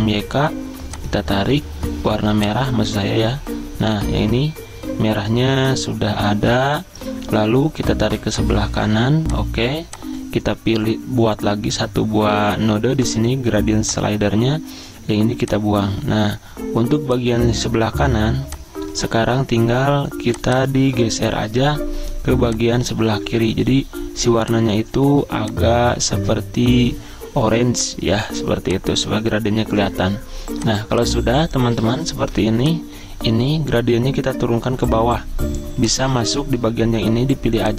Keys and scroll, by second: 32.1 Escape.